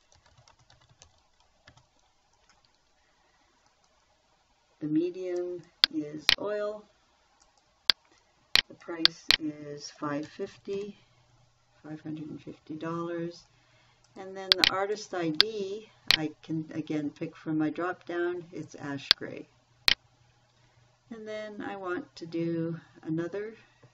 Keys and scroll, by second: 0.0-2.1 typing, 10.7 5, 11.2 0.